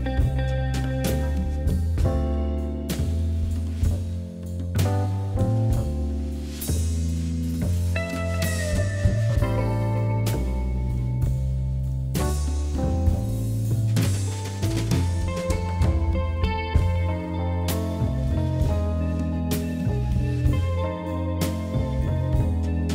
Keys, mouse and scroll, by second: 1.6 click, 2.4 ctrl+shift+b, 4.1-5.5 middle drag, 6.9 Tab, 7.3 Tab, 7.7 a, 8.6 q, 11.3-11.9 right drag, 11.9 KP_1, 12.9 KP_3, 14.0 shift+d, 16.7-18.2 middle drag, 18.2 click, 18.9 shift+a, 21.1 ctrl+2, 21.1 click.